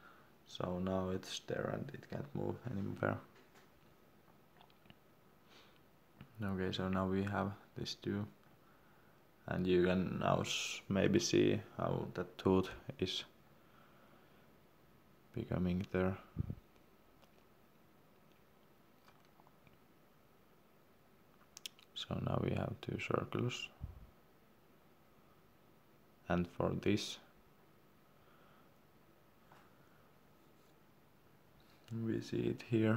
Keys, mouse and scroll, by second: 0.8 Escape, 1.6 click, 3.1-3.4 scroll up 1, 3.9-4.2 scroll down 1, 7.8 c, 9.6 click, 11.8 Escape, 12.7 click, 12.9 x, 13.9 click, 14.9 c, 15.6 click, 17.9 Escape, 18.3 click, 28.3-29.0 scroll up 1, 30.6-31.4 scroll down 1.